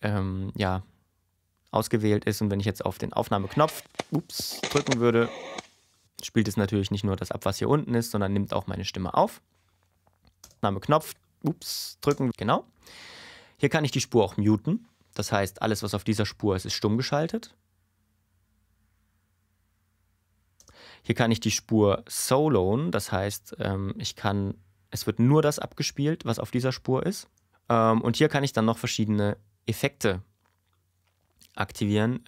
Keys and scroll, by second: 10.4 space, 12.1 space, 17.0 space, 20.6 space, 27.3 space.